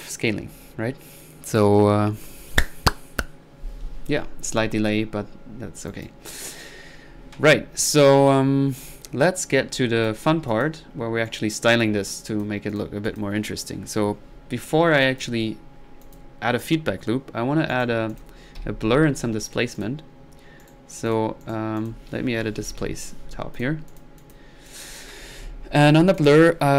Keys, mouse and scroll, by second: 4.2-4.5 middle drag, 4.5-5.0 drag, 5.3 typing, 5.5-5.9 middle drag, 5.9-6.3 drag, 9.7 click, 10.5 click, 11.3-11.8 right drag, 11.3 typing, 11.8 click, 12.7 click, 13.1 click, 13.4 click, 14.7-15.0 middle drag, 15.0-15.4 drag, 15.6 middle click, 16.0 drag, 17.7 right drag, 18.1 click, 18.6 b, 19.4 click, 20.6-21.0 right drag, 21.1-21.4 drag, 21.4 right drag, 21.8 click, 21.8-23.3 typing, 23.6-25.0 drag.